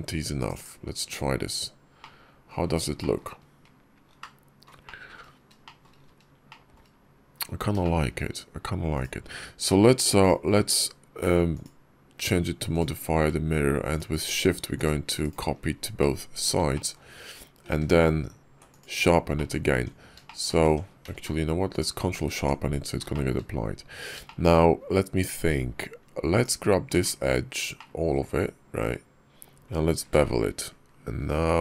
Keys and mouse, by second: 0.4 click, 1.8-2.3 middle drag, 2.8 shift+middle drag, 3.0 shift+drag, 3.5 KP_5, 4.0-4.5 middle drag, 4.7 shift+middle click, 5.5 shift+middle drag, 5.6 shift+click, 6.3 shift+middle drag, 6.5 shift+click, 7.7 shift+drag, 8.8 click, 9.5 middle click, 10.0 click, 10.4 alt+x, 15.8 middle click, 16.6 shift+click, 17.6 q, 19.2 click, 19.6 Tab, 20.1 shift+click, 20.5 Tab, 20.9 q, 22.2 Tab, 22.9 shift+click, 24.1 shift+click, 26.2 alt+click, 27.6 shift+click, 29.8 ctrl+b.